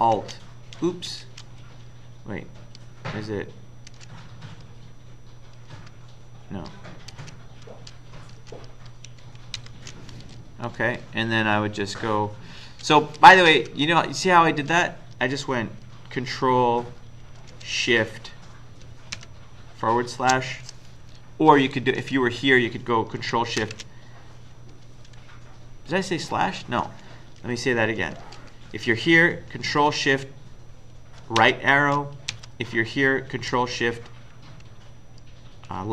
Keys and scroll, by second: 3.9 alt+Left, 5.7 alt+Left, 7.1 ctrl+Left, 7.7 ctrl+Right, 8.4 ctrl+Left, 9.6 ctrl+shift+Right, 13.5 Left, 19.2 ctrl+shift+Right, 22.0 Right, 23.6 ctrl+shift+Left, 28.2 Left, 31.4 ctrl+shift+Right, 32.3 Right.